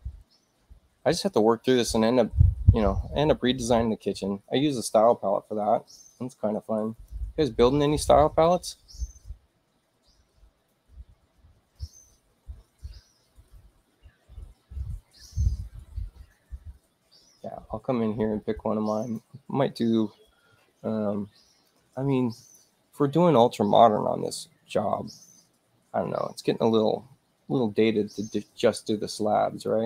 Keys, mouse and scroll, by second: 6.8 click, 7.8 click, 19.0 click, 21.6 click, 29.6 click.